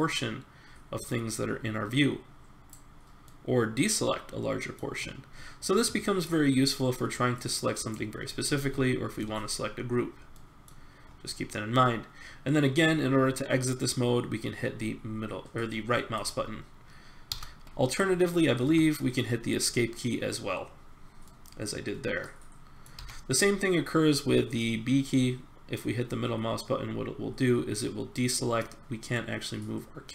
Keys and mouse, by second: 16.2-20.8 drag, 17.3 c, 21.2-22.4 middle drag, 22.6 middle click, 22.9 b, 29.2-30.1 middle drag.